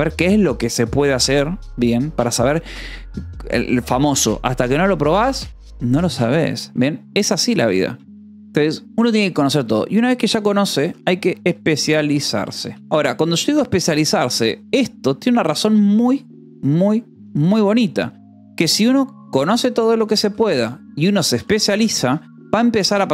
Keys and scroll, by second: 10.6-14.4 typing, 12.8 Escape, 18.6 Escape, 19.1-23.1 typing.